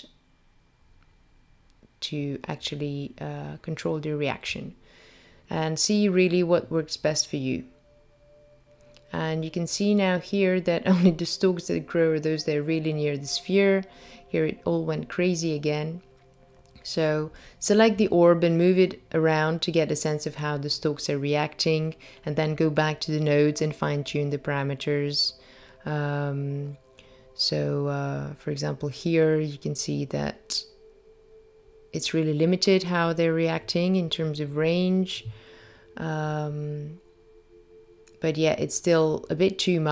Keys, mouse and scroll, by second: 1.4 click, 3.5 0, 8.9-9.2 scroll down 2, 9.9-10.6 scroll down 4, 10.6-12.1 scroll up 2, 12.6 click, 13.9 g, 17.4 click, 22.9 click, 24.6 g, 37.0 click.